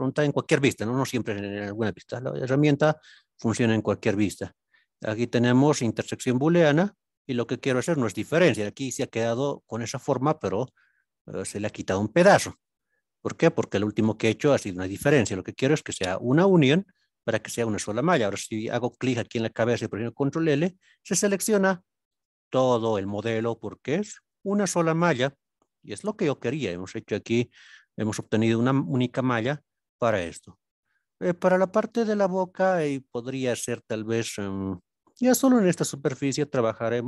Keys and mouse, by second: 0.7-2.9 middle drag, 4.2-6.7 drag, 8.6-9.4 middle drag, 10.4 middle click, 20.3 ctrl+l, 22.2 click, 25.4 click, 26.3-26.7 middle drag, 27.1-27.5 middle drag, 27.9-28.2 middle drag, 34.1 KP_1, 36.7 click.